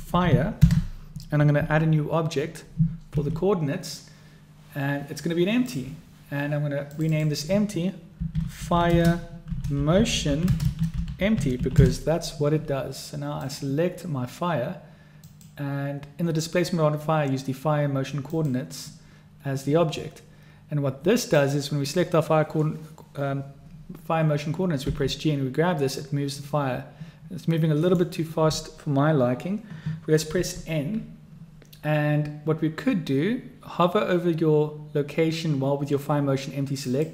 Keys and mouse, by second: 3.1 shift+a, 6.9-12.7 drag, 15.3-18.5 drag, 21.2 click, 24.9 g, 30.3 n, 36.9-37.1 drag.